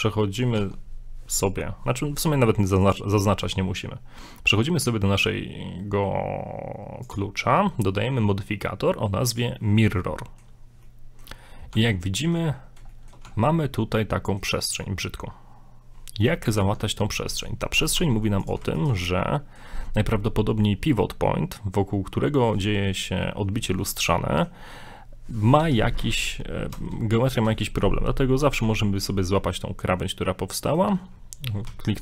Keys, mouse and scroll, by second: 0.6 Tab, 2.8 click, 7.1 click, 10.0 middle click, 10.5 scroll up 2, 10.8 middle click, 11.7 Tab, 12.1 middle click, 12.5-12.8 scroll up 1, 12.9 shift+middle click, 13.3 Tab, 13.4 scroll up 2, 13.6 middle click, 14.7-15.1 scroll down 2, 14.8 middle click, 16.6 Tab, 17.0 middle click, 18.0 ctrl+Tab, 18.8 alt+right click, 19.0 scroll down 2, 19.2 middle click, 19.9 scroll up 1, 24.1 middle click, 25.7 s, 29.5 middle click, 31.7 s.